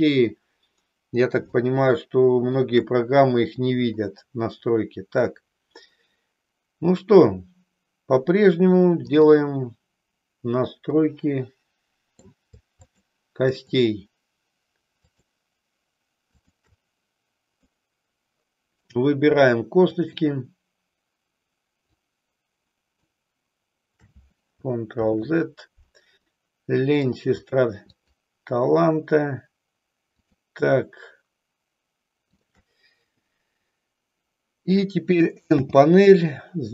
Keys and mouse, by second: 1.5-2.6 shift+middle drag, 9.0-10.4 drag, 11.0-12.4 middle drag, 12.9-14.4 shift+drag, 17.9-19.0 middle drag, 19.9-21.4 shift+drag, 22.0-23.0 shift+drag, 25.1 ctrl+z, 26.3 middle click, 28.0-29.4 shift+drag, 30.2-31.5 shift+drag, 32.4-33.5 shift+drag, 35.5 n.